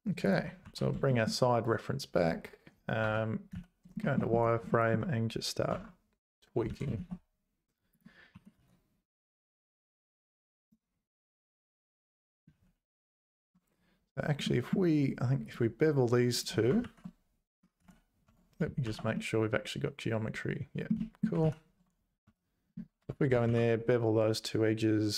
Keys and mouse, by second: 0.6 alt+h, 1.1 shift+middle click, 1.6 click, 3.0 `, 3.5 z, 4.0 shift+middle click, 4.7 shift+middle click, 5.7 Tab, 6.7 g, 8.3 r, 12.5 ctrl+z, 14.1 2, 14.4 middle click, 15.4 click, 16.3 shift+click, 16.8 ctrl+b, 17.8 z, 18.3 Tab, 18.8 shift+h, 19.1-20.9 middle drag, 21.0 ctrl+middle click, 21.1 click, 21.4 ctrl+z, 22.2 `, 23.0 Tab, 23.5 ctrl+b.